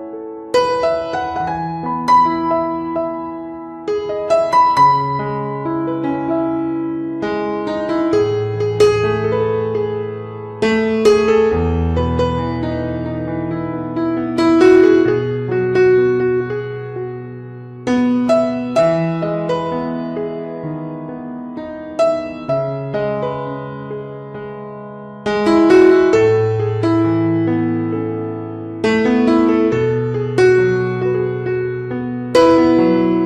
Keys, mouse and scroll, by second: 0.0 click, 1.1 click, 1.7 click, 2.1 middle click, 3.2 right click, 3.6 click, 4.5 click, 5.0 click, 5.5 ctrl+right click, 5.8 right click, 6.6 click, 7.0 click, 7.1-7.5 click, 7.3 click, 7.4 click, 7.8 click, 7.8 click, 7.9 click, 8.7 middle click, 9.2 right click, 9.6 click, 10.4 click, 11.1 middle click, 11.7 ctrl+middle click, 12.0 middle click, 12.4 ctrl+right click, 12.8 shift+right click, 13.1 right click, 13.7 ctrl+right click, 14.1 shift+right click, 14.4 right click, 14.9 click, 14.9 f, 15.5 click, 16.1 ctrl+right click, 16.3 right click, 16.8 click, 17.9 middle click, 18.5 ctrl+right click, 18.8 right click, 19.2 click, 20.2 middle click, 20.6 right click, 21.2 click, 22.4 f, 22.8 click, 23.2 f, 23.4 click, 23.8 middle click, 24.4 click, 26.4 middle click, 27.1 click, 27.7 middle click, 28.0 ctrl+right click, 28.2 right click, 28.3 ctrl+right click, 28.6 click, 28.9 ctrl+right click, 29.1 right click, 29.2 click, 29.8 f, 29.9 ctrl+right click, 30.1 right click, 30.2 click, 30.6 middle click, 31.1 ctrl+right click, 31.2 right click, 31.4 ctrl+right click, 31.6 f, 31.6 click, 32.5 middle click, 32.8 middle click, 32.9 click.